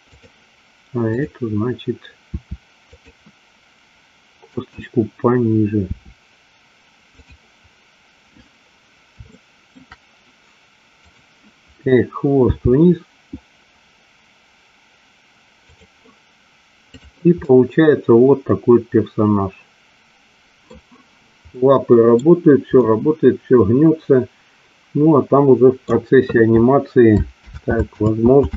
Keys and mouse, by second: 2.5 r, 3.0 click, 4.7 click, 5.9 r, 9.4 shift+middle click, 11.2 click, 12.5 g, 16.9 click, 17.4-20.8 middle drag, 21.6 middle click, 22.9-25.9 middle drag, 27.7 ctrl+z.